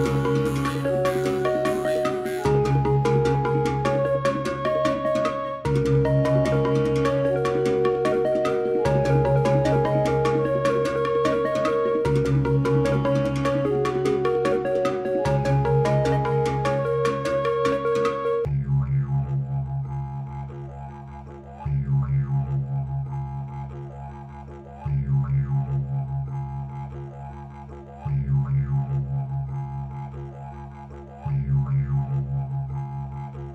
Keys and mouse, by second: 8.1-10.1 drag, 10.9 click, 12.1 space, 13.7 space, 14.5-16.3 drag, 15.9 space, 18.7 k, 20.4 x, 22.5 Page_Up, 24.1-24.9 drag, 25.6 g, 29.3 click, 29.9 click, 31.6 click, 32.9 k.